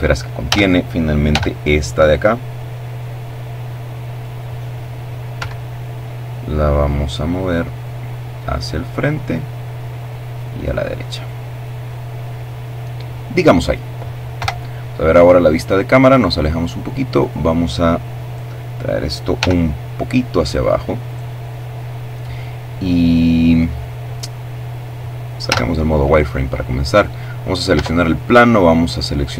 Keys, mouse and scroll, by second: 0.3-3.3 drag, 4.0 Escape, 6.4-8.4 drag, 8.7-10.3 drag, 13.0 KP_0, 14.3-15.4 scroll down 1, 15.7 right click, 18.0 g, 19.6 click, 24.0 z, 25.5 right click, 26.3 Tab, 27.4 right click, 27.9-28.5 scroll down 1, 28.5 shift+scroll down 1, 28.9 shift+right click.